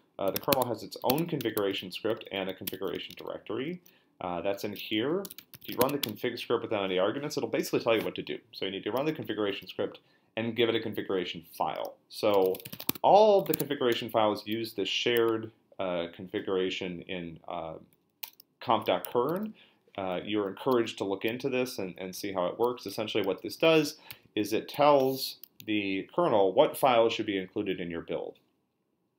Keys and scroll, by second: 0.0-1.0 typing, 1.1 Tab, 1.4 Return, 1.7 ctrl+l, 2.3-3.4 typing, 4.7-6.2 typing, 12.1-13.4 typing, 13.5 Tab, 13.9 Return, 19.3 f, 20.7-24.6 typing, 25.5 Down.